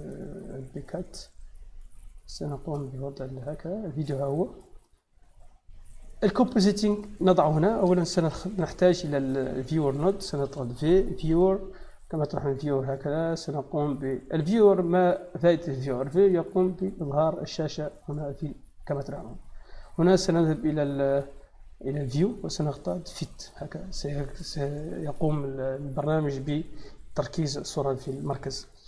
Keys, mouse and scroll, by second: 2.6 click, 3.7 click, 3.9 click, 5.2 click, 6.1-7.1 drag, 7.4 click, 8.0 shift+a, 9.4 click, 10.3 v, 10.7 i, 11.2 e, 12.3 click, 13.2 click, 16.7-18.0 drag, 21.9 click, 23.0 click.